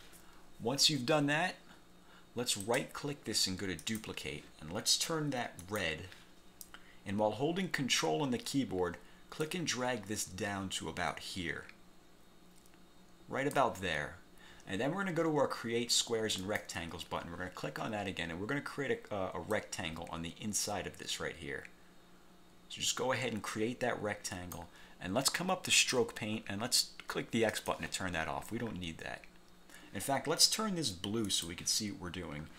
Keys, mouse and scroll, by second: 2.7 click, 3.9 click, 5.7 click, 7.9 scroll down 2, 9.5-13.9 ctrl+drag, 16.5 click, 19.7-24.9 drag, 25.8 click, 27.6 click, 31.4 click.